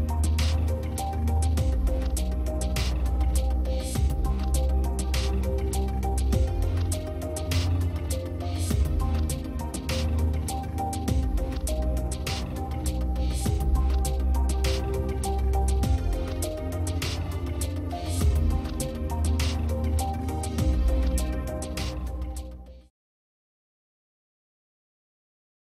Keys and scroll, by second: 1.4 ctrl+space, 1.7 ctrl+space.